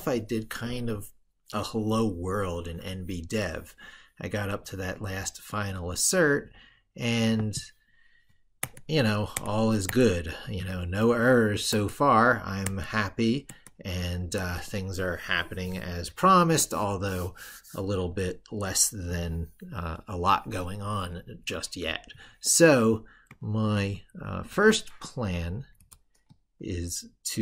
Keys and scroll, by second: 23.5 ctrl+super+Left.